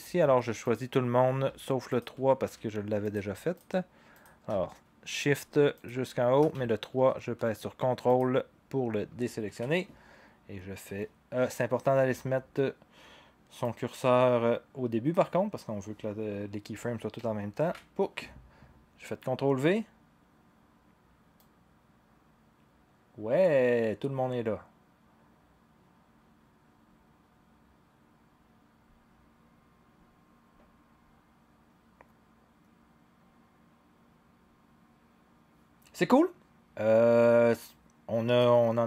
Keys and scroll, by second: 17.6 ctrl+v.